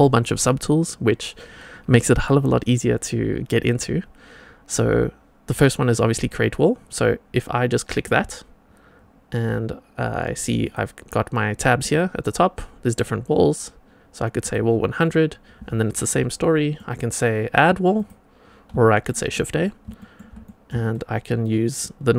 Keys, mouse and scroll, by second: 7.8 click, 10.6 click, 11.7-14.4 drag, 15.0-16.3 scroll up 1, 16.3 middle click, 17.9 click, 18.7 shift+middle click, 19.2-19.6 middle drag, 19.9 shift+middle click, 20.4 middle drag, 20.9-22.1 shift+right drag.